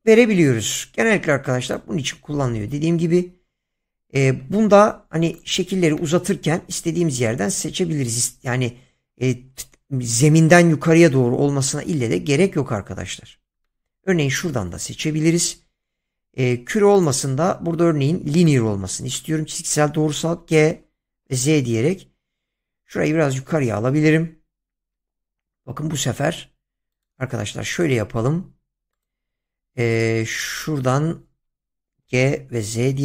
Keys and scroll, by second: 4.5 Tab, 20.3 g, 21.2 z, 32.0 g, 32.6 z.